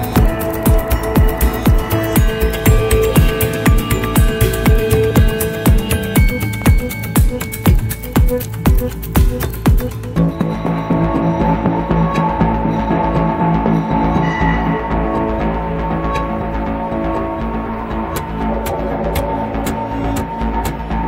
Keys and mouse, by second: 1.9 click, 5.5 click, 7.8 middle click, 13.3-20.5 drag.